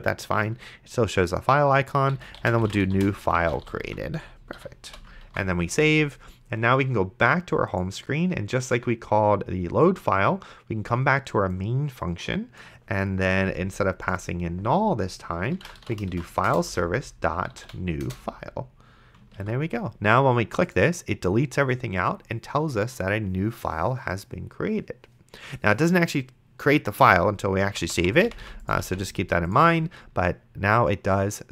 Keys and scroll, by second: 2.1-4.9 typing, 4.6 End, 5.5 ctrl+s, 15.5-18.4 typing, 19.7 ctrl+s, 28.0 d.